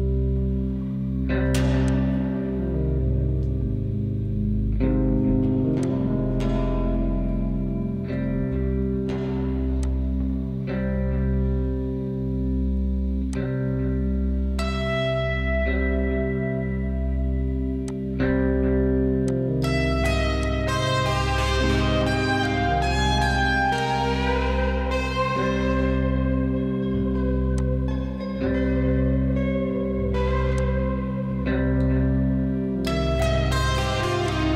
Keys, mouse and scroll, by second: 1.9 click, 3.4-20.5 middle drag, 22.0 s, 24.1-24.4 scroll up 1, 24.6-25.1 scroll up 6, 25.5-27.6 middle drag, 27.6 drag, 28.3-29.0 scroll down 5, 29.0-30.5 middle drag, 30.5 click, 34.3-34.5 drag.